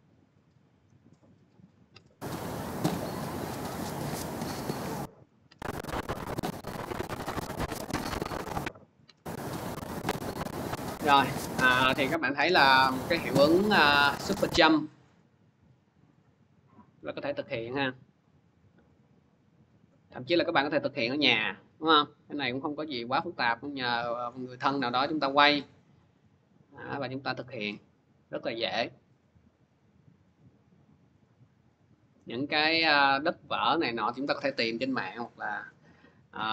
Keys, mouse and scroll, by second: 0.7 middle click, 1.7 click, 5.3-17.1 drag.